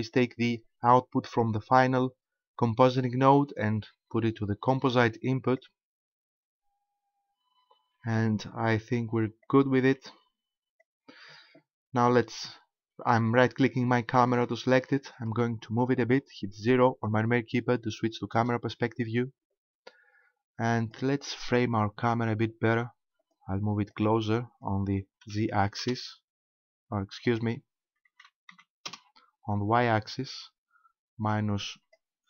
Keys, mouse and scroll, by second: 9.4 click, 14.3 right click, 18.4 KP_0, 20.8 click, 23.2 click, 27.3 click, 29.8 click.